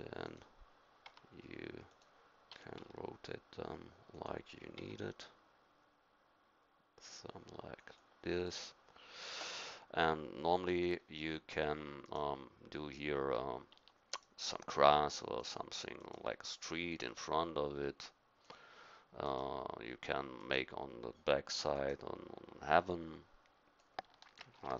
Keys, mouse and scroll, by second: 1.0 g, 2.5 r, 4.8 g, 12.1-13.8 drag, 13.8 Tab, 15.4-17.5 middle drag, 18.0-20.1 drag, 21.5-22.9 drag, 21.5 r, 23.1 click, 23.7 click, 24.6 ctrl+z.